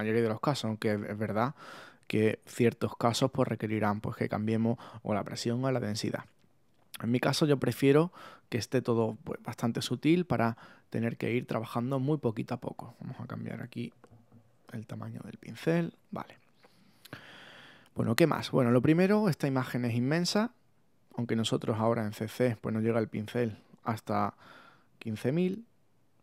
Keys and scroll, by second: 14.3 0.